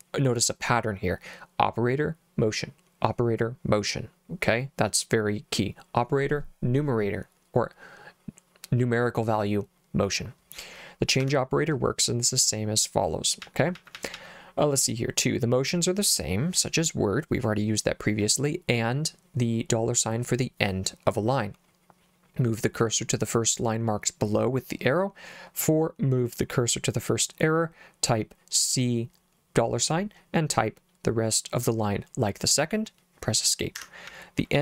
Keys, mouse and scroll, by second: 11.2 Escape, 13.4 j, 13.8 j, 14.0 j, 14.1 j, 33.8 Escape, 33.9-34.6 typing.